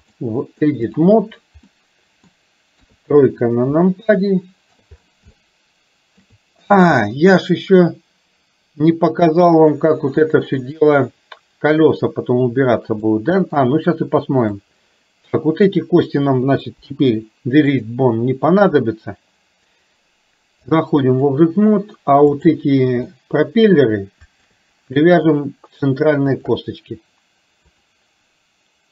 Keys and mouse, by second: 0.1 click, 1.9 middle click, 3.0 KP_3, 4.3 middle click, 5.5 middle click, 6.0 shift+middle click, 13.1 shift+middle click, 14.6-15.7 drag, 16.8 Delete, 20.7 click, 23.2 middle click, 26.3 shift+click, 27.7-28.9 drag.